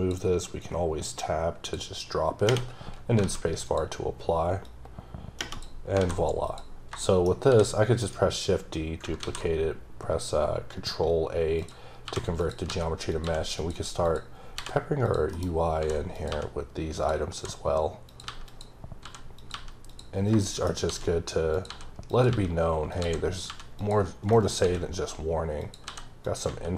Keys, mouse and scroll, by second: 0.6 click, 3.6 click, 4.7 click, 5.9 scroll down 2, 6.0 alt+a, 6.4 click, 7.0 shift+middle click, 7.5 shift+d, 8.0 right click, 9.2 ctrl+a, 11.6 click, 12.1 g, 12.4 click, 12.7 s, 13.1 click, 13.2 g, 13.6 click, 14.0 click, 14.5-19.5 typing, 15.0 click, 16.1 click, 16.9 click, 18.1 click, 18.5 click, 18.8 scroll down 2, 19.4 click, 19.9 click, 20.2 scroll down 3, 20.4 shift+middle click, 20.9 shift+d, 21.5 click, 21.7 s, 22.1 click, 22.3 g, 22.9 click, 23.5 g, 23.8 click, 24.2 shift+scroll down 3, 24.3 shift+middle click, 24.6 shift+d, 25.6 click, 25.9 s, 26.2 click, 26.5 g.